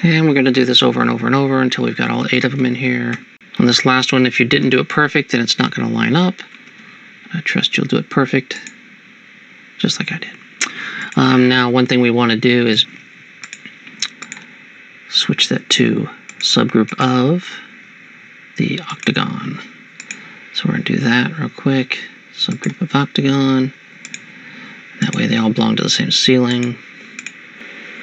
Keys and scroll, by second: 0.6 ctrl+v, 1.9 Tab, 2.1 Tab, 2.3 Tab, 2.5 Tab, 2.6 Tab, 3.2 Tab, 4.7 ctrl+v, 6.1 shift+Tab, 6.6 shift+Tab.